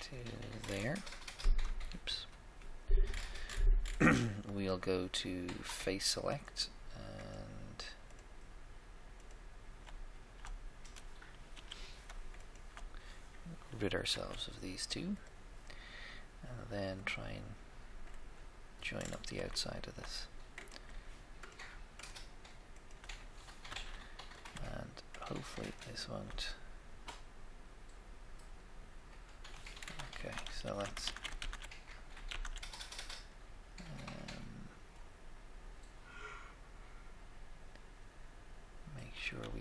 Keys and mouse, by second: 0.6 middle click, 2.0 3, 2.0 KP_3, 5.7-7.5 drag, 6.4-11.0 right drag, 11.6 z, 12.3 shift+click, 13.5 click, 14.2 x, 17.0 click, 18.2 middle click, 19.7 shift+middle click, 20.6-24.0 right drag, 23.6 f, 23.8 f, 26.5 middle click, 26.8-27.9 middle drag, 30.2 shift+middle click, 30.6 ctrl+z, 30.6 ctrl+z, 31.0 ctrl+z, 31.4 ctrl+z, 32.3 ctrl+z.